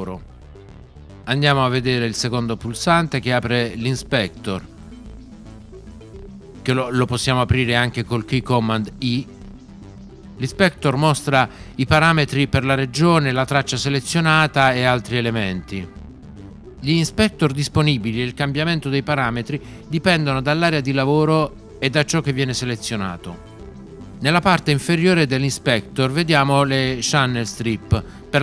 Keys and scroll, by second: 9.0 i.